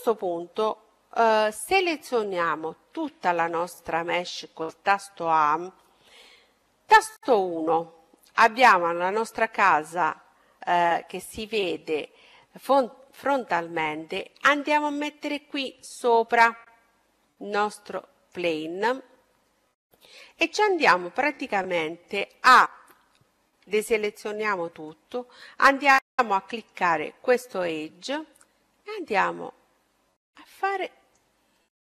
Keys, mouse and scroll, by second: 2.9 a, 3.5 a, 7.0 KP_1, 7.9-9.5 middle drag, 13.4-15.3 drag, 19.5-21.3 middle drag, 21.5-23.3 middle drag, 23.5 a, 24.7-26.6 right drag, 25.8-28.6 middle drag, 27.7-29.6 drag, 31.5-31.9 middle drag.